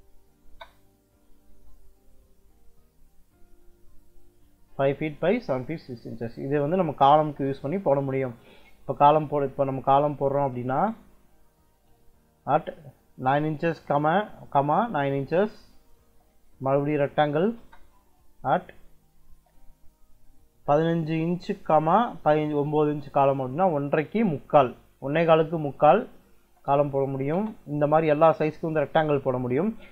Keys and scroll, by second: 0.3 space, 6.7 r, 7.3 e, 8.0 space, 9.1 Escape, 9.5-10.6 typing, 12.3-14.4 typing, 15.1 Return, 15.7-17.5 typing, 19.2 shift+2, 20.4 1, 21.1 ,, 21.9 9, 22.7 Return, 26.1-27.2 typing, 29.0 Escape.